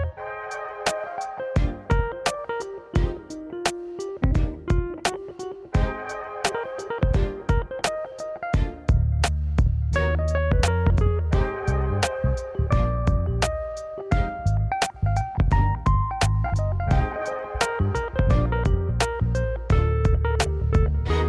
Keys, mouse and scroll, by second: 3.3 shift+d, 4.9 g, 7.3 g, 9.7-10.2 scroll up 1, 10.2 click, 10.6-11.1 scroll down 2, 12.9 click, 15.6 click, 18.5-19.1 drag, 19.5 click.